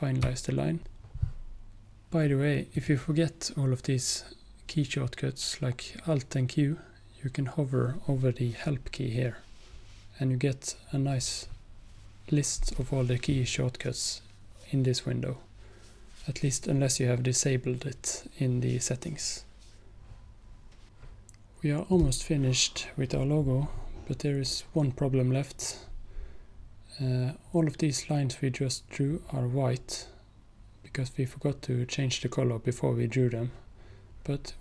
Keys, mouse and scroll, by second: 0.6 q, 0.8 click, 2.8 click, 20.9 click, 22.0 click.